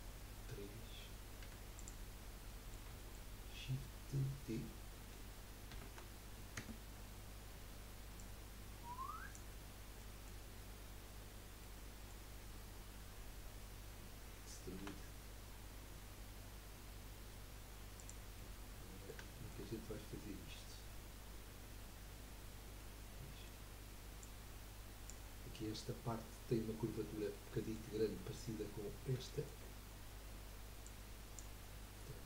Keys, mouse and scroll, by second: 1.4 3, 1.7 click, 2.5-5.7 middle drag, 5.7 shift+d, 8.1 click, 9.7 scroll down 2, 10.1 middle click, 10.5 scroll up 1, 11.8 middle click, 12.6-14.6 scroll up 1, 14.6-15.4 scroll up 1, 14.9 e, 18.5-20.3 middle drag, 20.3-20.8 scroll up 2, 22.8-24.2 middle drag, 24.2 click, 27.3-30.8 middle drag, 30.8 click.